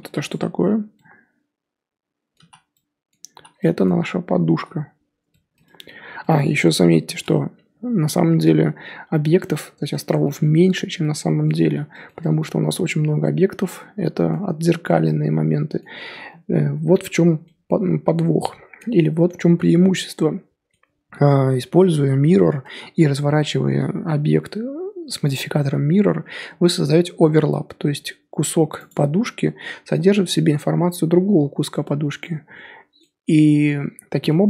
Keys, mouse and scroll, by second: 0.3 click, 0.9-2.3 middle drag, 2.3 z, 2.7 middle click, 3.3 z, 3.6-5.9 middle drag, 5.9 scroll up 3, 6.1 scroll down 1, 6.2 middle click, 6.7 Tab, 7.2 Tab, 9.3-12.0 middle drag, 12.0 scroll up 1, 12.2 middle click, 12.6-13.4 scroll up 1, 13.4 scroll up 1, 13.6-21.5 middle drag, 21.5-22.1 scroll down 3, 22.3-26.2 middle drag, 26.2-27.0 scroll up 2, 28.9 click, 30.0-34.4 middle drag.